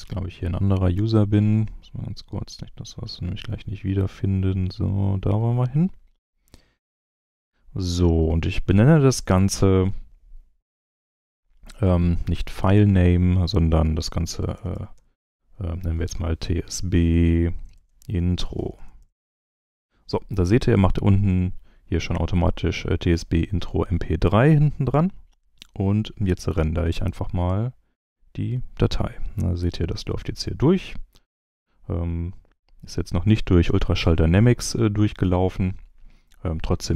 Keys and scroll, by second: 14.3-15.4 typing, 17.7-19.5 typing.